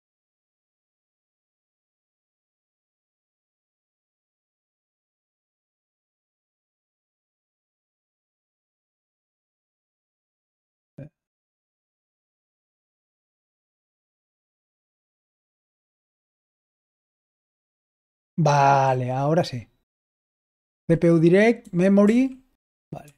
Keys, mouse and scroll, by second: 0.6 Left, 2.5 Right, 17.4 Right, 18.8 Right, 20.0 Left, 20.6 Left, 21.5 Left, 21.9 typing, 23.0 Right.